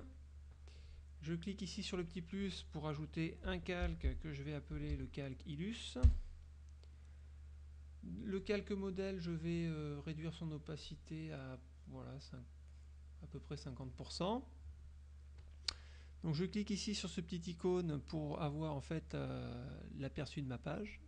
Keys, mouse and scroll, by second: 0.0 click, 2.0 click, 3.6-5.5 typing, 6.1 Return, 7.4 click, 8.5 click, 9.0 click, 11.0-14.0 drag, 14.4 click, 20.4 click.